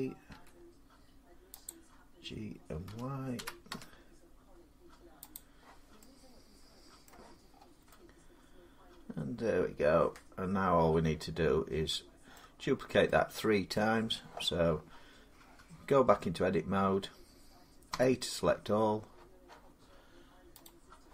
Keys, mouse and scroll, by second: 0.0-0.1 typing, 2.5-3.5 typing, 5.2 click, 6.9 middle click, 7.3 scroll down 3, 7.6 scroll, 9.8 scroll down 3, 12.1 middle click, 12.5-12.9 scroll down 5, 13.2 scroll, 13.6-17.6 middle click, 15.9 Tab, 17.7 a, 20.5 click.